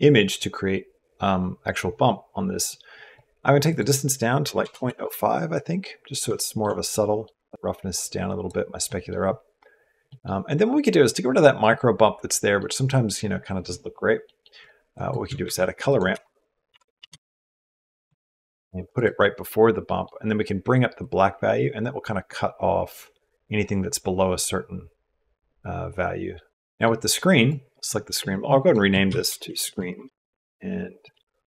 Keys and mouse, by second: 2.5 click, 2.9 click, 3.7-4.8 drag, 6.2 shift+middle click, 6.7 click, 6.9 middle click, 7.2 ctrl+click, 7.5 right click, 8.7 middle click, 9.9 middle click, 12.1 middle click, 14.1 middle click, 14.7 middle click, 15.1 middle click, 15.2 shift+a, 19.6 click, 20.8-26.6 drag, 27.2 click, 28.5-29.9 shift+drag, 29.6 e, 30.8 click, 31.3-31.5 drag.